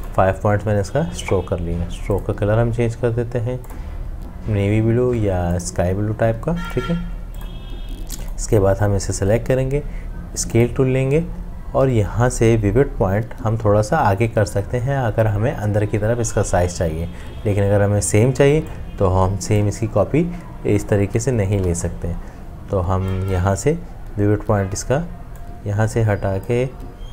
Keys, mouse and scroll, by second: 18.7 alt+click, 21.5 Escape.